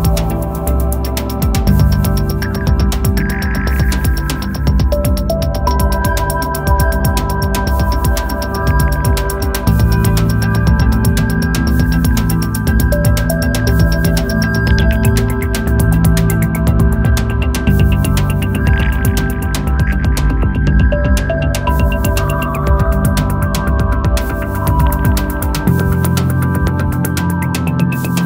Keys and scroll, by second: 5.5 space, 17.9 space.